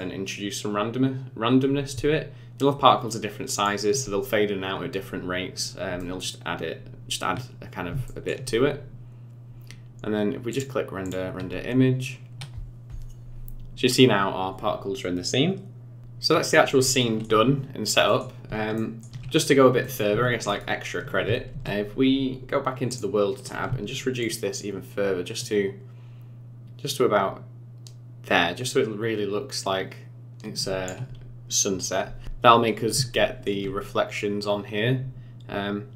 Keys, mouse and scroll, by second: 5.0-5.6 scroll down 3, 5.6-6.0 scroll down 2, 6.0 middle click, 7.6-8.0 scroll down 3, 8.0 shift+middle click, 10.5 click, 16.0 click, 16.0-16.3 scroll down 2, 16.3-17.0 scroll up 3, 17.0 middle click, 18.1 middle click, 18.7 shift+middle click, 18.9 shift+middle click, 19.3 scroll down 3, 19.8 middle click, 20.5 shift+right click, 22.9 click, 24.2 shift+click, 32.6 scroll up 6, 33.1 shift+middle click.